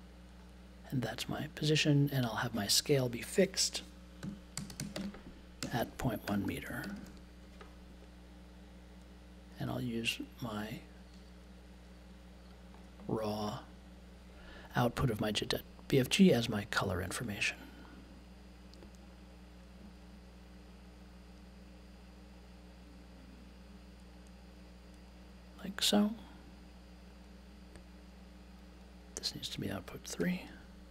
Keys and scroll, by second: 3.9-7.5 typing, 30.2 3.